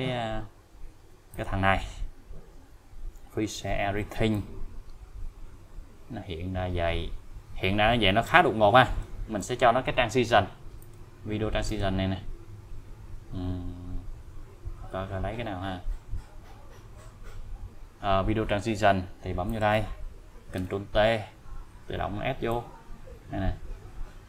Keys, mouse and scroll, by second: 1.3 click, 2.1-2.8 scroll up 1, 4.3-9.0 click, 10.8 click, 13.1-13.5 scroll up 1, 15.3-15.7 scroll up 1, 17.3 scroll down 1, 19.5 click, 20.6 ctrl+t, 22.5-24.2 click.